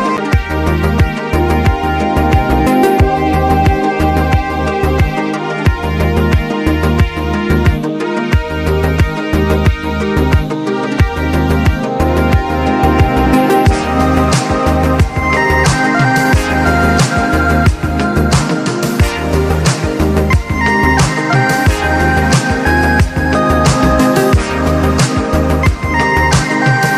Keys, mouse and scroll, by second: 0.4-4.7 drag, 6.1 ctrl+z, 7.4 click, 7.4-8.9 drag, 9.9 click, 11.2 click, 13.5 scroll up 1, 14.1 click, 14.6 scroll down 1, 19.6 click, 20.8 click, 21.9-24.2 drag, 24.8 click, 26.4 click.